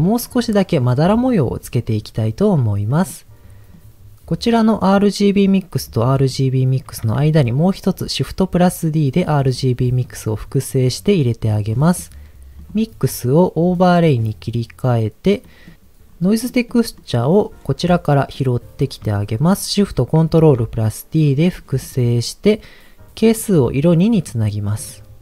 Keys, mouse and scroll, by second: 2.5-2.9 scroll down 1, 2.9 middle click, 3.7 click, 5.6 click, 6.2 click, 7.1 shift+d, 9.5 click, 11.7 middle click, 12.6-13.9 drag, 15.4 middle click, 16.0 scroll down 2, 16.4 middle click, 16.9 middle click, 18.2 scroll down 1, 20.1 ctrl+shift+d, 21.2 click, 21.5 middle click, 21.8-22.5 scroll up 6, 23.3 click.